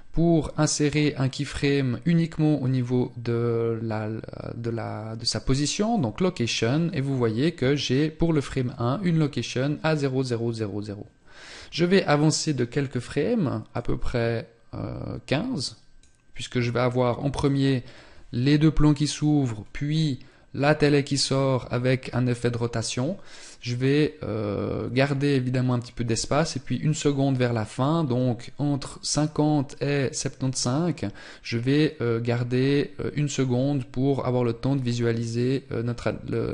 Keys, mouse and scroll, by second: 13.2 click.